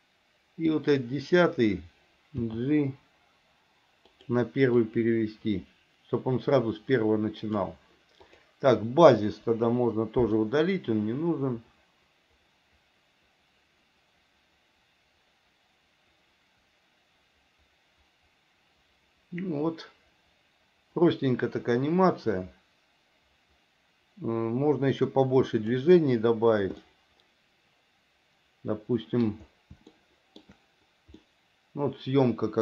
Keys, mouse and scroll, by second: 0.8 click, 2.5 g, 5.0-7.7 drag, 8.3 click, 9.6 Delete, 10.5-25.9 drag, 27.0-29.4 middle drag, 30.1 shift+middle click, 31.3-32.6 middle drag.